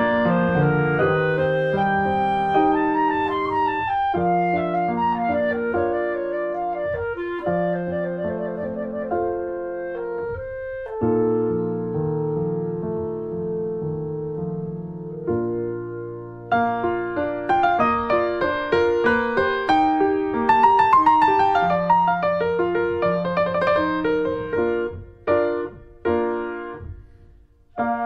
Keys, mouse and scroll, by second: 0.6 scroll down 1, 0.8-4.7 middle drag, 4.7 2, 5.2 3, 5.4 click, 5.7 click, 6.0-6.7 scroll up 2, 6.2 shift+middle click, 6.7 middle click, 7.2 2, 7.5 click, 8.5-8.9 scroll up 1, 8.9 shift+click, 9.2 alt+scroll down 1, 9.4 alt+middle click, 9.6 alt+middle click, 9.9-10.3 scroll down 2, 10.3 shift+middle click, 10.5-11.1 shift+scroll up 2, 11.1 shift+middle click, 12.0 r, 14.1 middle click, 14.8 scroll down 1, 15.3 alt+middle click, 16.3 r, 19.2-20.3 middle drag, 20.3 ctrl+z, 20.6 scroll down 2, 20.9 alt+middle click, 21.5 scroll down 2, 21.8 shift+middle click, 22.2 scroll down 1, 22.4 r.